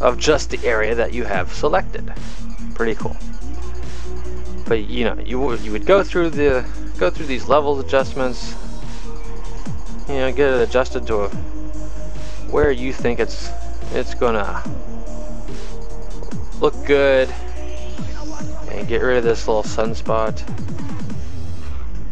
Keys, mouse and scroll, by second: 6.6 click, 8.7 click, 9.9 click, 12.8 click.